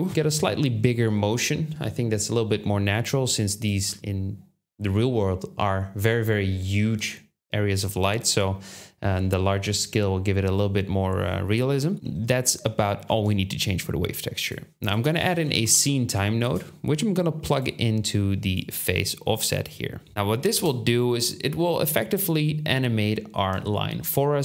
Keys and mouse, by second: 0.0-3.3 shift+drag, 6.5 click, 13.0 shift+a, 17.2 click, 18.4-19.3 drag, 20.5 space.